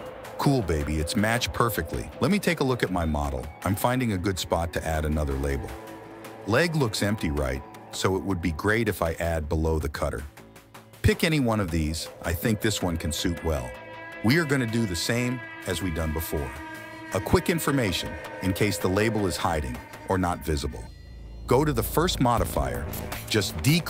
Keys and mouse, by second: 0.0 click, 0.9 click, 3.7 /, 5.4 click, 8.4 click, 8.9 /, 9.8-12.3 drag, 12.9 click, 15.5 s, 16.9 click, 17.6 click, 18.9-20.1 drag, 22.6-23.8 drag.